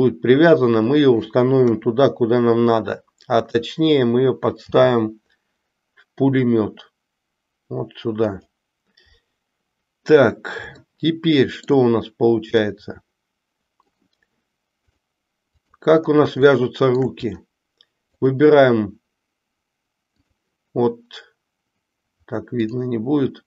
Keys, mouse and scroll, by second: 4.7 g, 10.8-11.8 shift+middle drag, 12.7-14.1 middle drag, 14.9-15.9 drag, 16.5 shift+middle click, 18.2 click, 22.7 click.